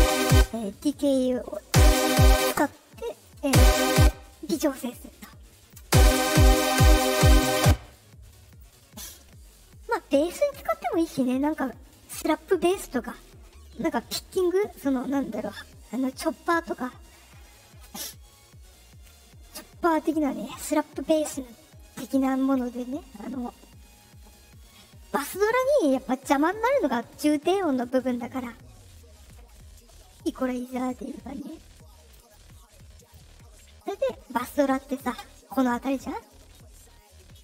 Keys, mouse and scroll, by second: 0.0 click, 0.2 space, 0.8 click, 1.5 space, 2.3 space, 2.6 click, 3.3 space, 3.9 space, 5.5 click, 5.7 space, 7.5 space, 8.4 click, 32.1 click, 32.9 click.